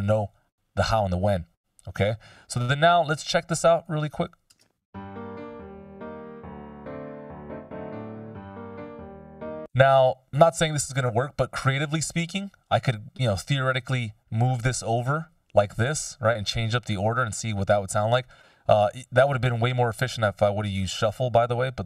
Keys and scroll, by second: 0.1 F16, 4.7 shift+space, 9.1 space.